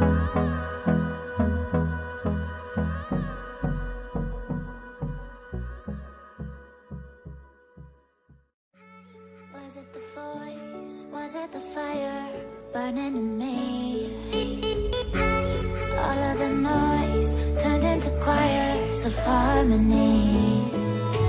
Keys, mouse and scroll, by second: 7.5 click, 8.9 double click, 9.8 click, 16.6 click, 16.8 click, 18.6 Left, 18.9 click, 19.8 click.